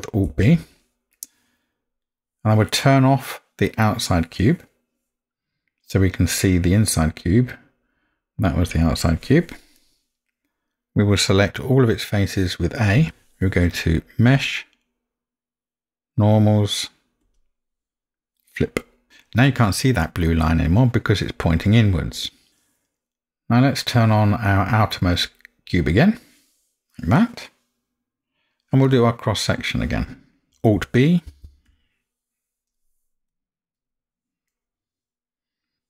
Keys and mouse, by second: 0.2 alt+b, 1.1-2.0 middle drag, 9.8-10.7 middle drag, 13.0 a, 14.3-18.5 drag, 22.2 middle drag, 30.5 alt+b, 30.9 alt+b, 34.5-35.8 middle drag.